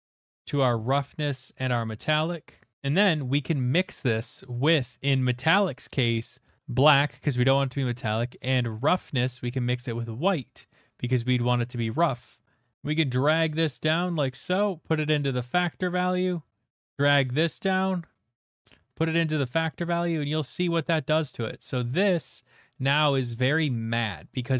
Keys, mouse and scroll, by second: 0.4 click, 0.5 d, 1.5 click, 2.7 click, 2.7 middle click, 6.4 click, 8.7 click, 10.1 middle click, 10.4 middle click, 12.7 ctrl+z, 12.7 middle click, 12.7 click, 15.0 click, 15.6 middle click, 16.3 middle click, 18.8 click, 21.7 middle click, 22.2 middle click, 23.2 middle click, 23.3-23.9 scroll, 24.0-24.5 scroll.